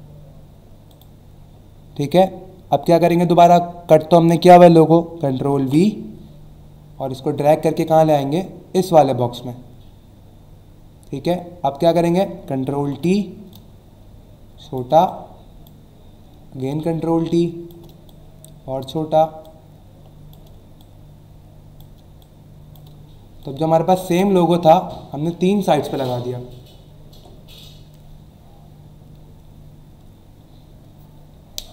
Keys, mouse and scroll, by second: 0.9 click, 5.6 ctrl+v, 7.4 click, 13.5 click, 15.1 click, 16.7 shift+click, 19.4 shift+click, 22.2 shift+click, 23.4 click, 24.1 Return, 25.1 alt+scroll down 1, 25.9 alt+scroll up 1, 26.6-27.0 alt+scroll up 2.